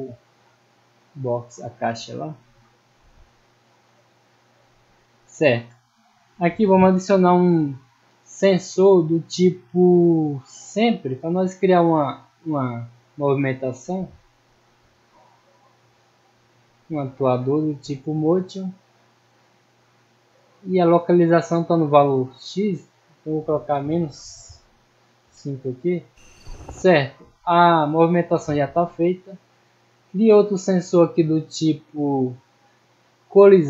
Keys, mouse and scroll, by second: 0.2 click, 1.4-1.9 middle drag, 2.5-2.9 drag, 3.2-3.6 middle drag, 3.7-4.2 scroll up 2, 4.2 middle click, 5.1 middle click, 6.2 middle click, 8.3 click, 10.7 click, 11.3-12.4 middle drag, 14.0 click, 16.5 click, 17.4 middle click, 18.0 scroll down 1, 19.2-20.9 drag, 21.3 middle click, 22.6 click, 25.1 click, 26.9-27.6 middle drag, 28.1 middle click, 29.4 middle click, 30.5 click, 31.3 scroll up 2, 31.7 middle click, 32.5 click, 33.3 click.